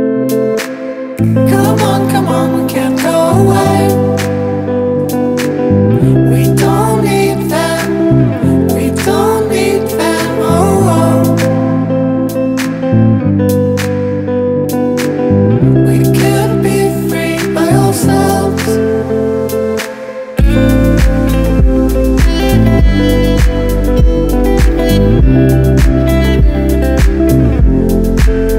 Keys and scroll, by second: 13.4 scroll down 1, 21.2 scroll down 1.